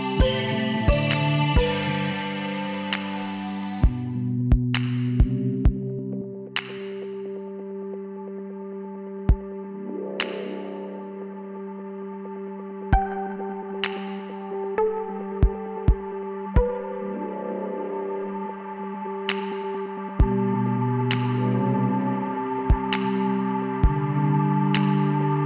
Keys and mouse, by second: 0.0 right click, 0.3 b, 2.7-5.1 drag, 4.4 b, 5.5 click, 5.7 middle click, 7.7 middle click, 8.6 click, 8.9 b, 13.1 b, 19.7-22.5 drag, 19.9 b, 23.1-24.8 drag.